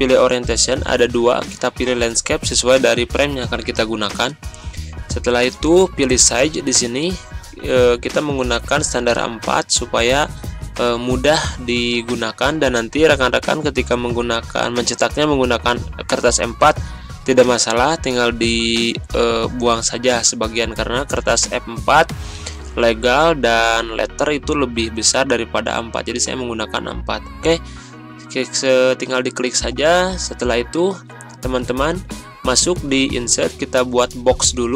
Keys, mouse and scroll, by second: 29.1 click.